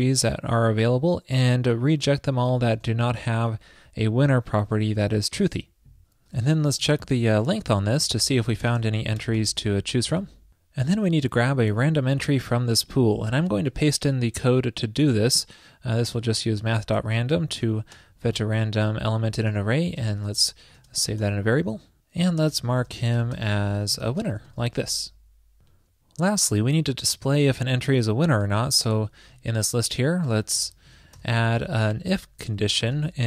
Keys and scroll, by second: 3.4 alt+shift+Left, 5.0 super+Right, 14.2 super+v, 16.6 shift+super+Left, 24.8 super+s, 29.4 super+Right.